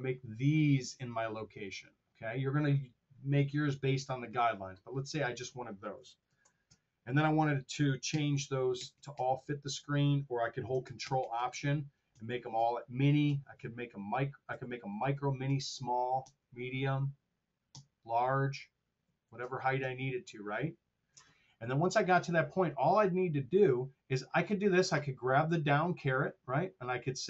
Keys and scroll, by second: 6.2 ctrl+alt+super+Down, 7.9 ctrl+alt+super+Down, 10.9 ctrl+alt+Down, 13.1 ctrl+alt+Up, 14.4 ctrl+alt+Down, 15.0 ctrl+alt+Up, 17.6 ctrl+alt+Up, 18.9 ctrl+alt+Down, 19.6 ctrl+alt+Up.